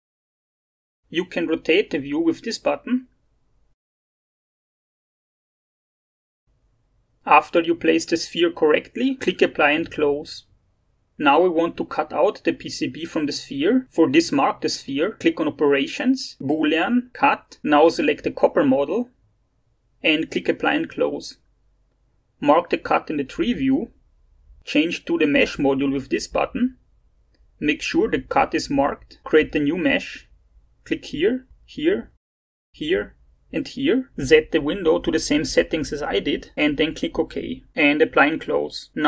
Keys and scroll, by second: 0.3-1.7 typing.